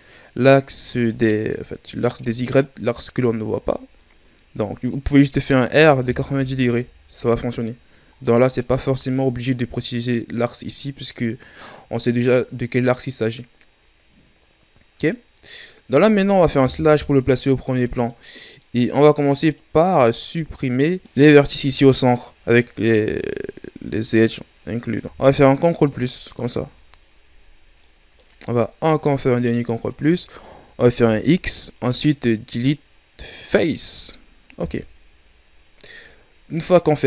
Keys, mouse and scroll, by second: 1.5-2.9 scroll down 2, 2.9-3.5 scroll up 1, 3.5-3.9 scroll up 3, 3.9-5.7 ctrl+scroll down 3, 5.7 r, 8.1-9.0 ctrl+scroll down 4, 9.0-9.9 ctrl+scroll up 2, 9.9-12.2 scroll up 2, 16.6 KP_Divide, 17.8 scroll down 2, 18.0 middle click, 18.7-19.4 scroll up 2, 19.4 right click, 19.9-21.0 middle drag, 21.0 scroll down 1, 21.0-24.1 middle drag, 25.0 KP_1, 25.9 ctrl+KP_Add, 26.3 ctrl+KP_Add, 27.8-28.8 middle drag, 28.8 ctrl+KP_Add, 31.0 x, 34.5 KP_1, 36.1-36.8 shift+scroll down 3, 36.8-37.0 scroll up 3.